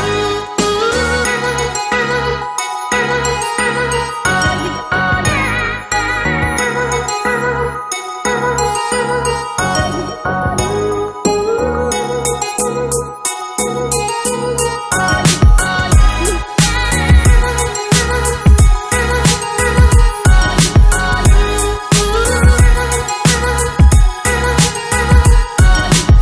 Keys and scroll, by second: 4.5 ctrl+[, 5.5 ctrl+shift+[, 5.8 ctrl+], 9.2 ctrl+[, 25.3 ctrl+d.